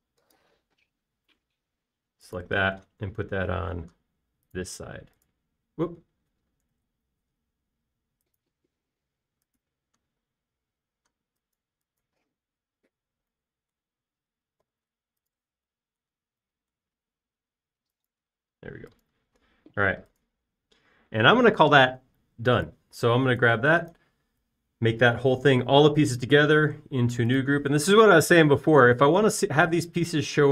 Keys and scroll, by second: 1.7 b, 16.1 b, 20.1 space.